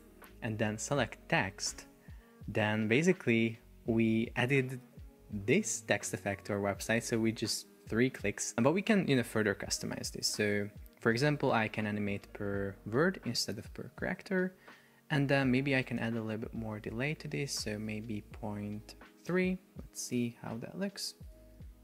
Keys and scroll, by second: 4.9 super+p, 8.5 Escape, 16.5 Up, 20.2 super+p.